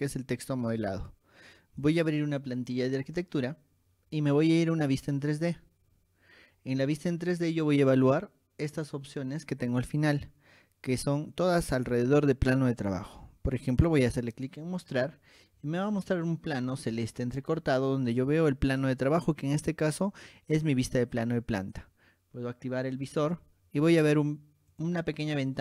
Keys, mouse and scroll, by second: 2.0 click, 5.2 click, 14.9 click, 15.7 scroll down 2, 16.2 shift+middle click, 17.3 middle click, 23.2 click, 24.9 click, 25.3 middle click, 25.3 scroll down 2.